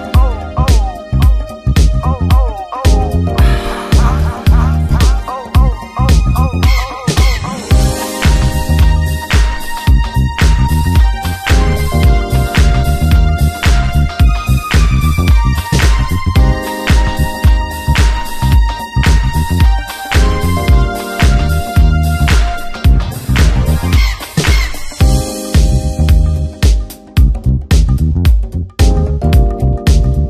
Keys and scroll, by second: 4.1 space, 6.6 space, 8.0 space, 10.4 space, 13.8 ctrl+KP_Subtract, 15.0-15.9 typing, 18.0 Return, 18.4 space, 19.0 ctrl+w, 19.0 Return, 20.2 alt+space, 21.6 c, 22.0 Return, 22.5 f, 24.1 ctrl+space, 28.0 f, 28.6 w, 30.1 Return.